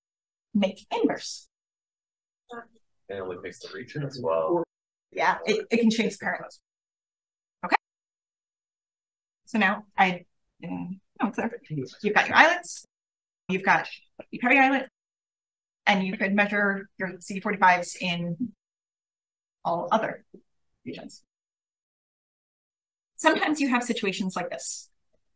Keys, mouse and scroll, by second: 7.7-8.2 drag, 8.5-9.6 scroll up 1, 9.4 click, 9.6-10.9 scroll down 1, 10.9-11.3 scroll down 1, 11.2 click, 12.4 click, 12.6 click, 14.4 click, 14.6 click, 19.4 click, 21.5 click, 22.5 click, 22.7 scroll up 1, 23.6-24.0 drag.